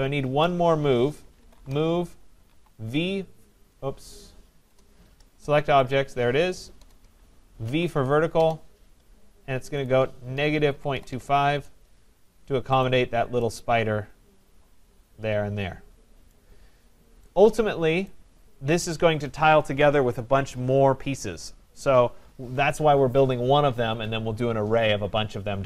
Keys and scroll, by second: 1.6 Return, 4.7 BackSpace, 6.7 Return.